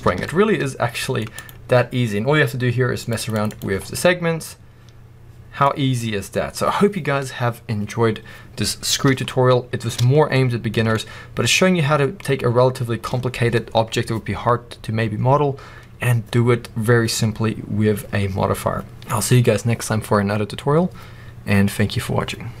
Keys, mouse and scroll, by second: 0.0 alt+a, 0.1-1.2 middle drag, 1.2 click, 2.9-3.9 drag, 3.7 scroll down 2, 3.9-22.6 middle drag, 5.5-6.5 scroll up 2, 6.5-9.2 scroll up 1, 10.1 scroll down 2, 10.7 alt+a.